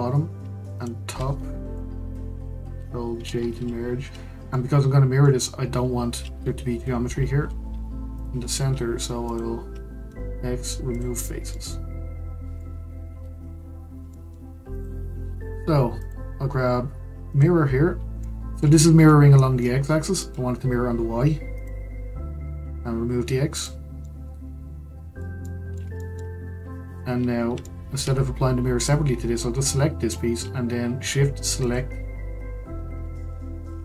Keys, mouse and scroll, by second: 0.7 shift+click, 3.1 ctrl+j, 4.5-6.3 middle drag, 6.3 Tab, 7.7 3, 8.1 click, 9.2 shift+click, 10.0 x, 11.2 scroll down 3, 11.5-13.1 middle drag, 13.1 Tab, 14.1-14.7 middle drag, 14.7 click, 17.4 click, 18.3-18.8 middle drag, 18.8 scroll down 1, 19.0-21.5 middle drag, 21.5 click, 23.5 click, 24.0-26.5 middle drag, 26.5-26.8 scroll up 1, 27.6-28.8 shift+middle drag, 28.8 drag, 31.6 shift+click.